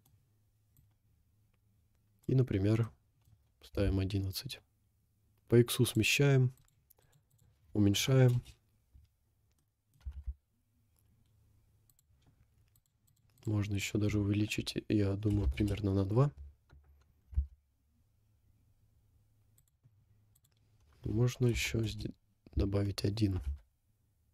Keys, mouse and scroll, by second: 0.0 click, 0.8-2.4 drag, 2.6 scroll down 1, 2.8 middle click, 3.6 g, 6.6 click, 7.1 click, 8.4 click, 9.4 scroll down 2, 9.6 middle click, 10.1 g, 12.8 click, 13.1 click, 17.3 g, 20.4-22.0 drag, 23.0 scroll up 1, 23.4 g.